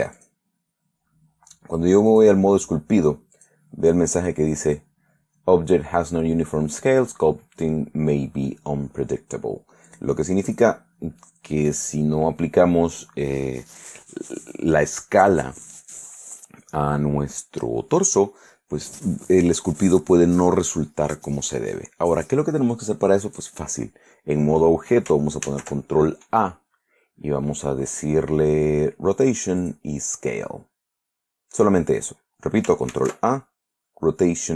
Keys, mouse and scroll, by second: 0.3 click, 2.3 click, 3.5 click, 10.0 click, 10.6 click, 25.6 ctrl+a, 29.8 click, 33.1 ctrl+a.